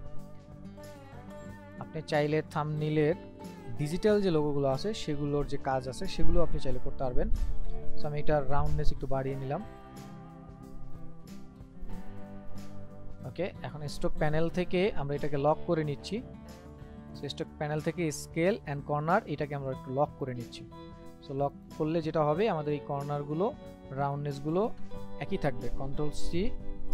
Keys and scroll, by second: 26.2 ctrl+c, 26.8 ctrl+f.